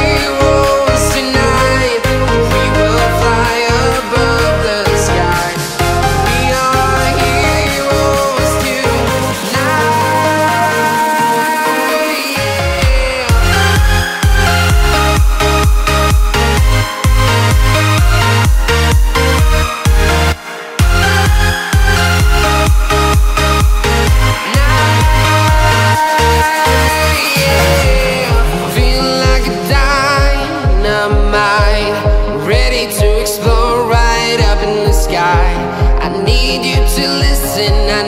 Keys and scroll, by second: 1.5 alt+super+space, 1.6 alt+super+space, 1.7 alt+super+space, 1.8 alt+super+space, 2.0 alt+super+space, 2.0 alt+super+space, 3.1 alt+super+space, 3.4 alt+super+space, 4.4 alt+super+space, 5.0-9.9 typing, 11.7-13.1 typing, 24.2 space, 24.7 alt+super+space, 24.8 alt+super+space, 24.9 alt+super+space, 25.0 alt+super+space, 25.3 alt+super+space, 25.4-26.0 typing, 26.2 alt+super+space, 31.1 super+z, 36.5 space, 37.0 alt+super+space, 37.1 alt+super+space, 37.2 alt+super+space, 37.6 alt+super+space.